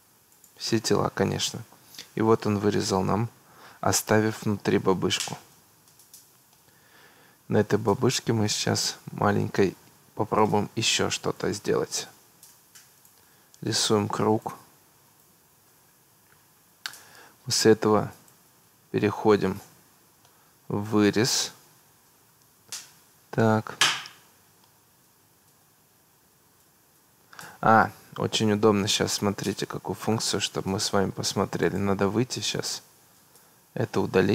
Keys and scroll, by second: 28.6 Escape, 33.3 Escape.